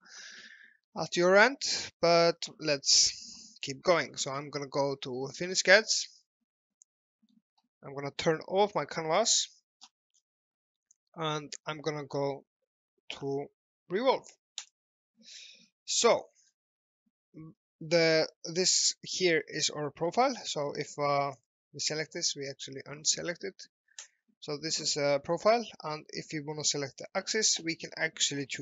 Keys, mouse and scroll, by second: 2.1 alt+middle click, 3.0 alt+middle click, 5.9 click, 6.7 middle click, 9.2 click, 9.8 scroll up 1, 10.5 middle click, 11.8 middle click, 14.7 click, 16.0 alt+middle click, 20.4 click, 24.1 click, 25.4 alt+middle click, 26.8 click.